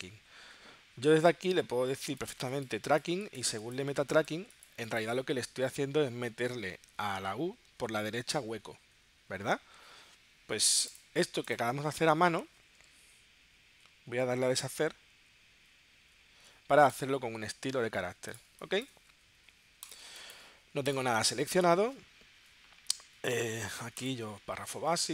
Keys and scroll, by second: 18.5 space, 20.1 space.